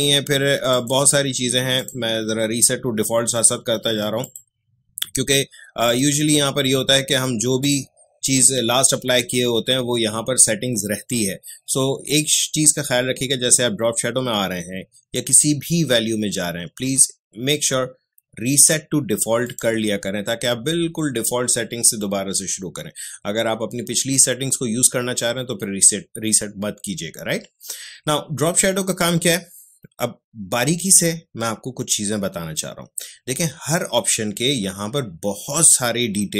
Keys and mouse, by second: 4.2 click, 12.0 click, 19.4 click.